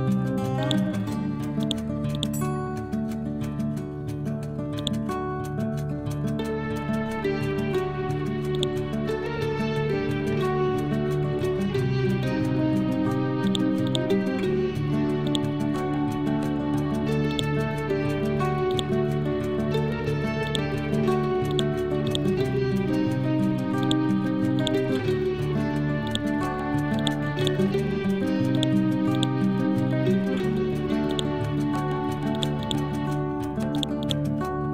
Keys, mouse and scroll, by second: 0.7 click, 4.8 click, 6.0 scroll down 1, 6.8 scroll up 1, 8.6-12.4 drag, 12.4-13.5 scroll down 1, 13.5 click, 14.3-14.8 scroll down 1, 15.3 click, 15.9 scroll down 1, 17.4 click, 18.0 ctrl+z, 18.8 right click, 20.5 click, 22.8 scroll down 1, 23.9 click, 24.6 right click, 26.1 click, 29.2 right click, 31.1 click, 32.7 right click, 33.8 click, 34.1 right click.